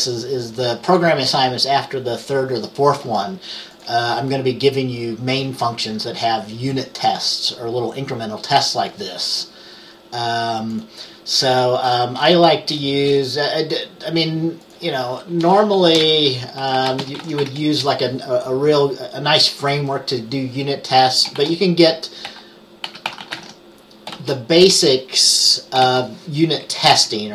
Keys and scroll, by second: 15.6 Return, 16.1-18.0 typing, 21.5-24.8 typing, 25.9 typing, 27.0 Right.